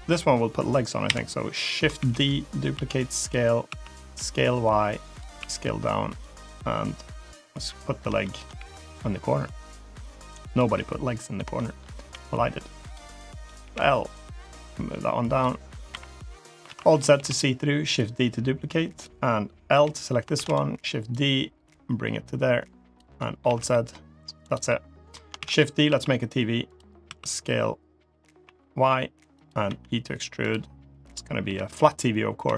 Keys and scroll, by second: 0.9 KP_7, 1.8 shift+d, 2.6 s, 3.5 s, 5.2 s, 8.4 g, 11.9 e, 13.5 l, 15.8 KP_7, 16.5 alt+z, 17.0 shift+d, 19.6 l, 20.2 shift+d, 23.3 alt+z, 25.2 shift+d, 25.7 s, 26.9 s, 29.5 e, 31.3 l, 32.3 g.